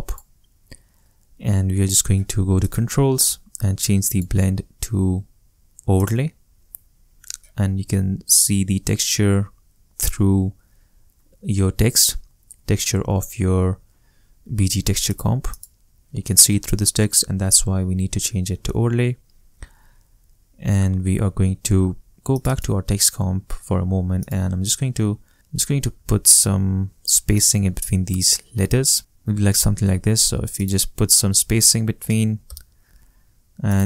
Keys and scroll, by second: 26.1 super+a, 29.0 Return, 31.5 4, 32.0 0, 32.5 Return.